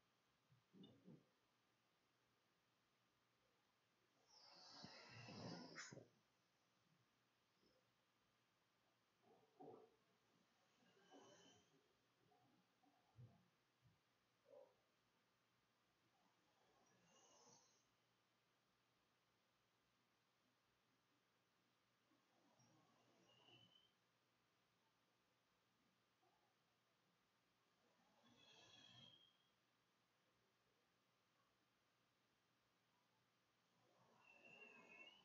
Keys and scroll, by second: 11.9-16.7 typing, 17.7 a, 18.1 Tab, 18.9-20.9 typing, 25.2-26.2 typing, 27.4 Tab, 31.2-32.8 typing, 33.1 Return.